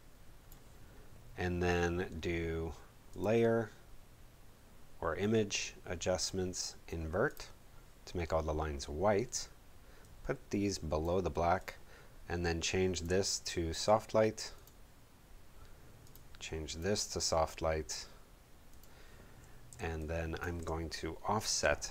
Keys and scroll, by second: 19.7 space.